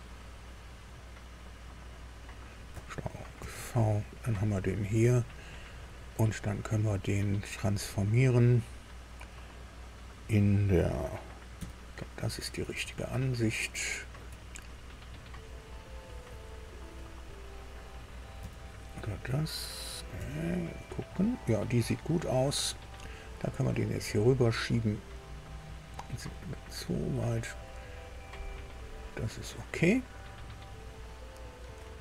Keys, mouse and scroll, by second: 1.8 click, 3.3 ctrl+v, 3.9 ctrl+scroll down 3, 4.9 click, 6.4 right click, 7.6 click, 11.5 KP_4, 12.9-14.2 shift+middle drag, 18.3 KP_2, 20.1 KP_3, 23.0-28.5 drag, 30.1 click, 30.9-32.0 drag.